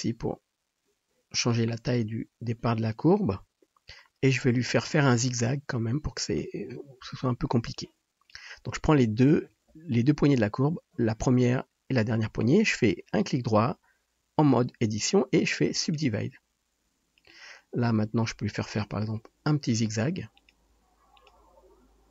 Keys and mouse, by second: 1.6-7.7 middle drag, 3.3 KP_7, 6.6 KP_7, 7.7-16.2 drag, 13.1-16.2 middle drag, 13.1-16.2 right drag, 17.4-22.1 drag, 17.9 g, 19.2 r, 20.7 s, 21.4 r.